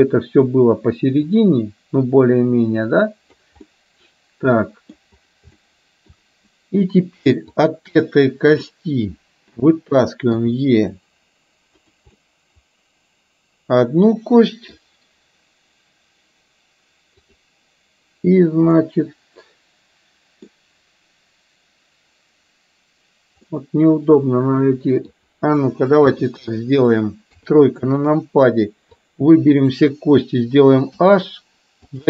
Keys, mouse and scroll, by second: 1.2 click, 2.4-3.5 drag, 3.7-5.0 scroll up 1, 5.6-6.2 shift+scroll up 1, 6.2-7.0 scroll down 1, 7.5 click, 8.6-9.7 middle drag, 11.7 e, 12.4-14.9 middle drag, 18.7-20.5 middle drag, 23.5-25.2 middle drag, 27.2 KP_1, 28.8 KP_3, 29.1 click, 31.1 h, 31.9 click.